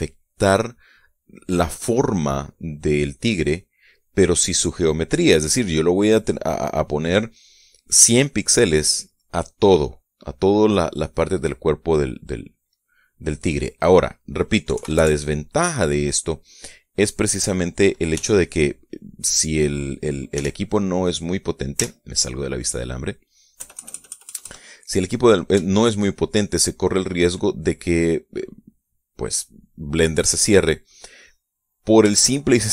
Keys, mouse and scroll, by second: 1.5 right click, 3.5 scroll down 1, 3.7-4.1 scroll up 1, 8.1 right click, 8.7 right click, 10.1 right click, 12.3 right click, 14.1 click, 15.3 KP_Decimal, 15.4 KP_5, 15.5 KP_Enter, 18.7 f, 19.9 click, 20.9 f, 21.6 click, 22.4 z, 23.1 middle click, 24.2 KP_Add, 25.3 click, 26.3 shift+click, 27.2 shift+click, 30.7-32.7 drag.